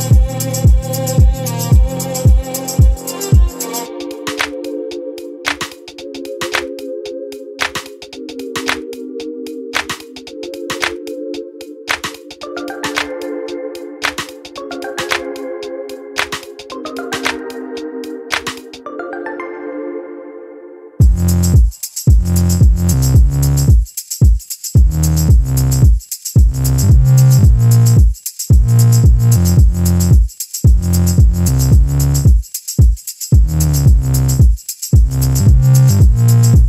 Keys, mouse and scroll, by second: 1.1 click, 2.6 click, 3.3 click, 3.9-4.5 ctrl+scroll down 3, 6.5 space, 7.4-7.9 ctrl+scroll up 2, 8.1 ctrl+click, 9.9-11.3 shift+drag, 13.1 ctrl+g, 14.4-17.0 ctrl+drag, 17.6 ctrl+click, 18.4 ctrl+click, 19.7 shift+click, 20.3 shift+click, 21.8 shift+click, 23.5 click, 24.8-26.2 drag, 26.3 ctrl+y, 28.3 space, 31.2 click, 31.8 click, 32.4 click, 33.2 shift+click, 34.4-36.6 shift+drag.